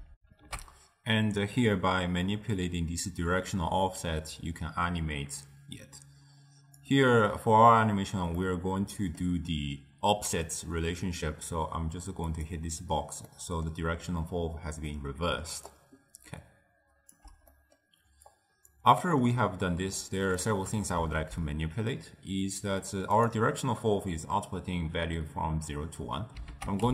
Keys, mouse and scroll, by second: 0.2 ctrl+alt+shift+w, 0.6 ctrl+alt+shift+q, 3.7-6.0 drag, 8.5-11.5 middle drag, 12.4 click, 13.4-15.4 middle drag, 15.4 d, 15.8-17.3 right drag, 17.3 d, 17.6-18.5 middle drag, 18.5 click, 19.0-20.1 middle drag, 20.1 click, 21.4 ctrl+a, 26.6 ctrl+a.